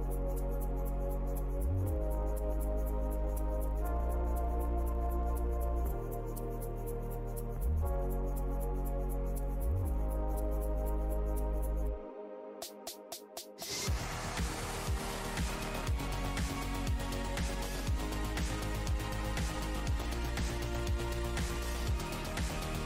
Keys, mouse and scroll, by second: 0.8 e, 1.4 click, 2.4 w, 6.9 ctrl+right click, 7.3 ctrl+click, 8.8 Delete, 9.1-9.7 scroll up 1, 10.0 right click, 10.1 click, 10.5 f, 10.8-11.7 scroll, 11.7 scroll down 1, 11.8 click, 12.9 right click, 13.3 click, 13.7 ctrl+s, 13.9-14.3 scroll down 1, 15.2 alt+click, 16.6 click, 19.4 shift+right click, 21.1-21.9 typing, 22.4 right click, 22.6 click.